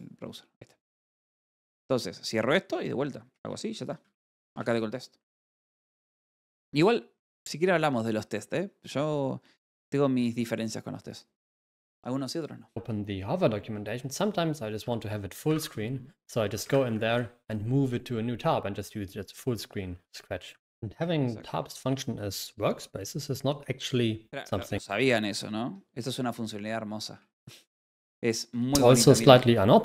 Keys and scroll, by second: 3.7 l, 4.5 a, 5.8-6.7 typing, 7.7 f, 7.8 BackSpace.